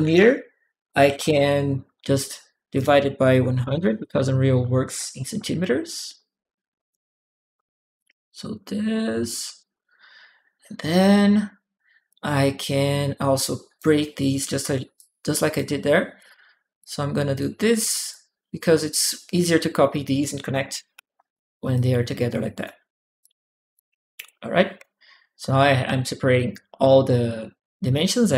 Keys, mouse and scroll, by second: 0.9 click, 0.9 z, 1.0 z, 1.0 Return, 2.5 click, 5.9 click, 7.8 click, 9.1 click, 9.5 click, 11.9-13.5 drag, 14.0 click, 14.7 click, 16.0 click, 16.1 click, 16.6 click, 17.9 click, 19.2 click, 20.5 ctrl+c, 20.8 ctrl+v, 21.5 ctrl+click, 23.0 click, 24.5 click, 26.2 right click.